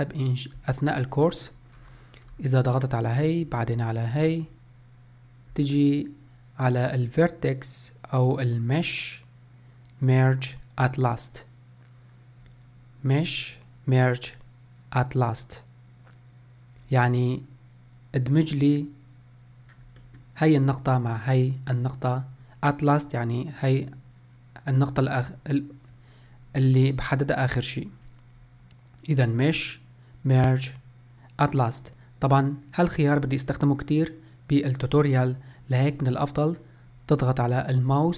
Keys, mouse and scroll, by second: 1.9 scroll up 3, 2.4-3.3 scroll down 1, 3.3 click, 4.3 shift+click, 7.2-12.1 drag, 20.3-23.3 middle drag, 29.4-32.5 drag.